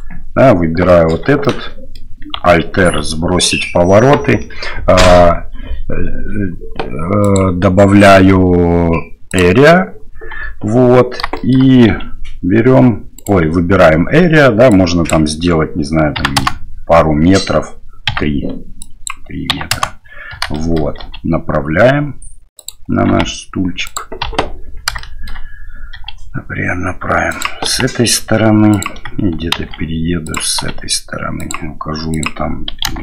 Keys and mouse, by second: 0.9 shift+middle drag, 1.4-1.9 middle drag, 2.8 alt+r, 9.3 click, 10.4 KP_1, 11.3 shift+middle drag, 11.9 r, 14.7-16.6 drag, 18.1 KP_3, 18.9-19.9 drag, 20.5 shift+middle click, 21.0 r, 23.1 g, 24.2 KP_7, 25.0 shift+click, 25.9 r, 27.7 g, 29.5 shift+d, 30.6 r, 32.1-33.0 drag.